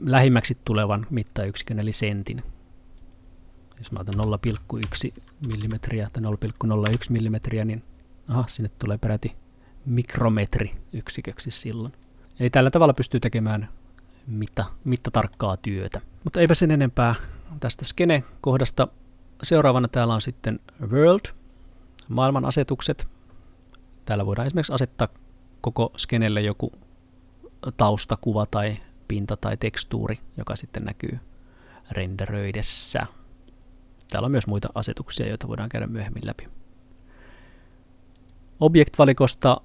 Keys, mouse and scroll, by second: 3.0 click, 4.5-5.6 typing, 6.9 Return, 11.9 click, 12.2 Return, 13.0 middle click, 21.0 click, 38.2 click.